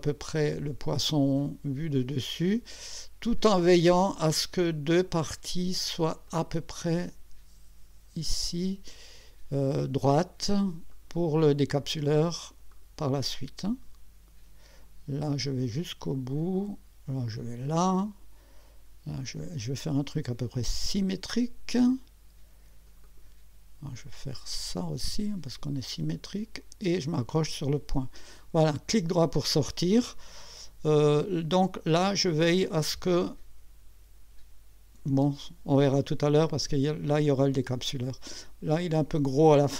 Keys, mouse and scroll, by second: 6.3 click, 8.4 click, 10.9 click, 12.7 click, 16.0 click, 17.3 click, 19.2 click, 20.9 click, 23.0 click, 25.4 click, 27.3 click, 28.9 right click, 31.9-35.2 drag.